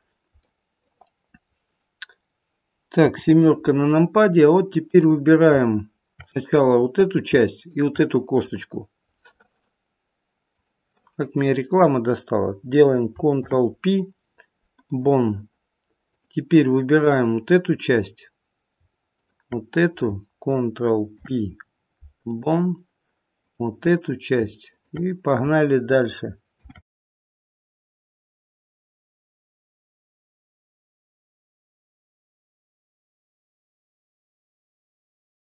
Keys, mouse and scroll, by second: 24.5 click, 27.6 click.